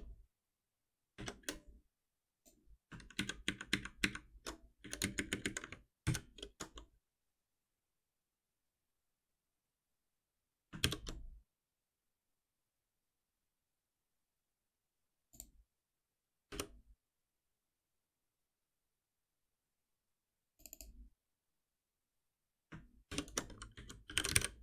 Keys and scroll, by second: 3.1 ctrl+shift+Up, 6.0 ctrl+alt+n, 10.4 ctrl+s, 10.8 shift+F10, 16.5 alt+F7, 23.1 shift+F6.